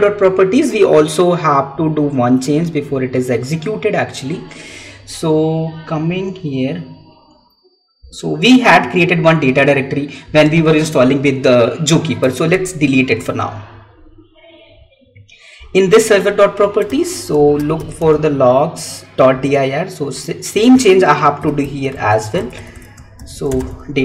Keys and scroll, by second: 12.4 Delete, 22.1 Right.